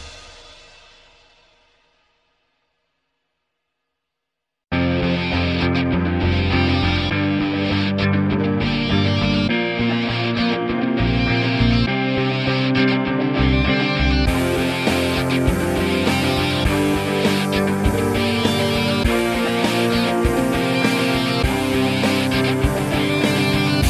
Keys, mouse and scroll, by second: 0.1 ctrl+z, 0.2 alt+middle click, 0.3 alt+click, 1.1 alt+middle click, 1.2 alt+click, 1.4 alt+middle click, 1.8 alt+right click, 2.0 shift+click, 2.4-5.8 typing, 2.6 alt+click, 3.0 alt+click, 3.6 click, 4.0 click, 4.7 alt+click, 5.4 click, 5.9 click, 6.8 alt+right click, 7.0 alt+click, 7.3 alt+right click, 7.4 alt+middle click, 7.7 shift+c, 7.8 alt+click, 8.0 f, 8.4-9.4 ctrl+drag, 9.7 alt+click, 9.9 alt+middle click, 10.0 alt+click, 10.6 alt+middle click, 10.7-11.8 alt+drag, 13.1 alt+middle click, 13.2 alt+click, 13.3 alt+middle click, 13.7-14.7 ctrl+drag, 15.4 alt+middle click, 15.4 alt+click, 15.6 alt+middle click, 15.8 alt+click, 15.9 alt+right click, 16.0 alt+middle click, 16.7-18.1 ctrl+drag, 18.1 alt+middle click, 18.2 alt+click, 18.4 alt+right click, 18.5 alt+click, 18.9 alt+middle click, 19.2 alt+click, 19.3 alt+middle click, 19.4 alt+right click, 19.6 alt+middle click, 19.7 alt+click, 19.9 alt+middle click, 20.0 alt+click, 20.2 alt+middle click, 20.4 alt+click, 20.5 alt+middle click, 20.9 alt+click, 21.0 f, 21.5-22.8 ctrl+drag, 22.8 ctrl+z, 23.0 ctrl+click.